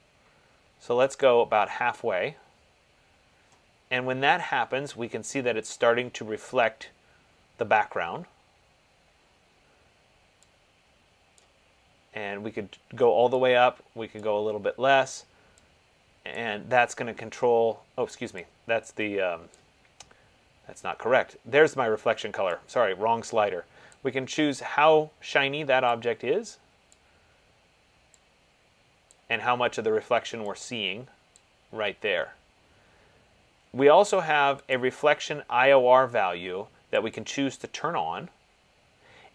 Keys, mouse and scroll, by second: 1.5 click, 11.6 click, 14.8 click, 19.8 click, 24.0 click, 27.1 click, 31.6 click, 35.0 click, 37.4 click.